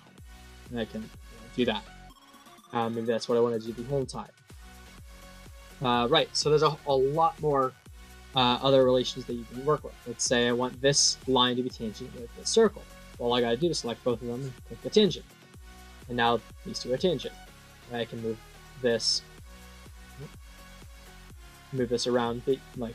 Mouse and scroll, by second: 0.8 click, 1.3 click, 1.4 click, 1.8 right click, 2.4 click, 4.9 middle click, 8.2 middle click, 10.2 click, 12.3 click, 14.6 click, 15.4 click, 17.2-18.3 drag, 19.0-19.6 drag, 19.9 click, 20.8-22.9 drag.